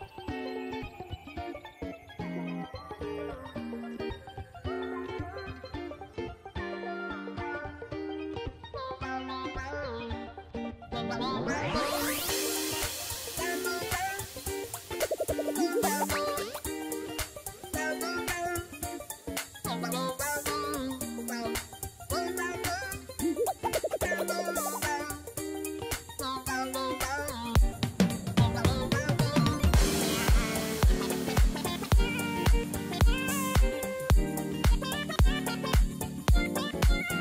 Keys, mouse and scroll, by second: 6.8 2, 7.8-11.2 ctrl+drag, 8.2 ctrl+t, 13.7 click, 14.2 click, 17.7 right click, 18.6 ctrl+-, 19.1 ctrl+-, 19.5 ctrl+-, 20.1 ctrl+=.